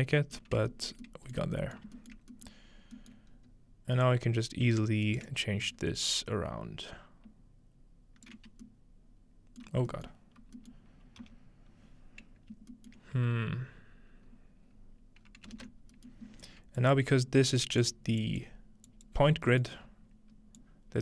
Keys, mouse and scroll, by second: 0.6-2.0 scroll up 1, 1.4 shift+middle click, 1.8 shift+middle click, 2.2 shift+middle click, 2.7 scroll down 1, 3.3 scroll up 1, 4.1-8.4 drag, 5.1 right click, 5.3 shift+right click, 10.1-12.3 middle drag, 10.3-11.9 scroll down 1, 11.2 typing, 11.9-13.5 scroll up 1, 12.8-14.7 shift+middle drag, 14.7-15.2 scroll up 2, 15.2-15.5 scroll down 2, 16.1-17.6 middle drag, 16.2 scroll up 1, 16.8-17.8 drag, 17.6-18.2 scroll up 1, 18.2 click, 18.9 click, 19.2-20.9 scroll down 1, 20.9 click.